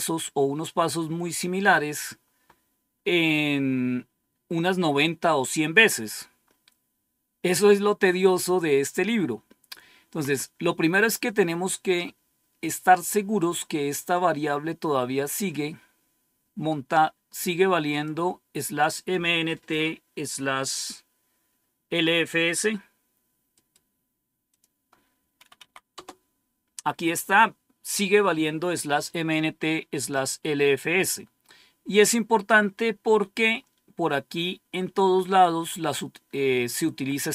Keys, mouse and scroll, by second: 1.0-2.0 scroll down 1, 5.7-6.3 scroll up 1, 6.5-7.2 scroll up 1, 7.2-7.9 scroll up 1, 7.9-8.5 scroll up 1, 8.5-9.7 scroll down 1, 14.0-15.4 drag, 16.6 right click, 17.8 click, 18.7 click, 23.4 right click, 24.4 click, 25.5 Right, 25.8 Return, 30.8-31.1 scroll down 2, 33.5-34.1 scroll down 3, 36.1-36.6 scroll down 2, 36.6-37.3 scroll down 1.